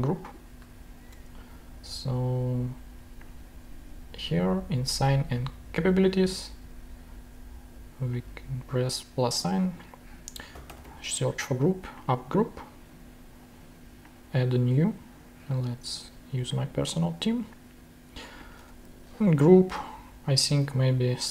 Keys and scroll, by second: 0.5 super+Tab, 10.2-11.4 typing, 20.1 shift+super+v.